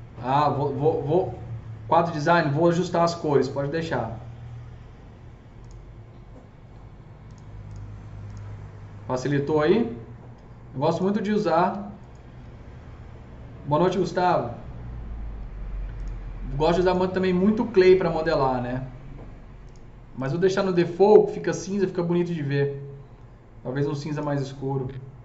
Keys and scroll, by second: 12.3 d.